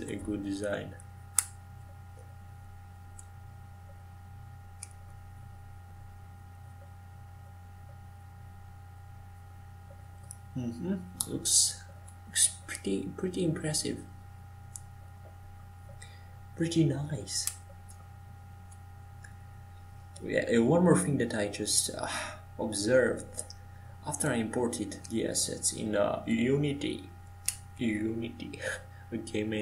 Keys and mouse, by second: 0.9 ctrl+j, 5.6-10.4 right drag, 10.4 ctrl+j, 16.0-22.1 right drag, 22.1 g, 24.3-29.6 right drag, 29.4 click.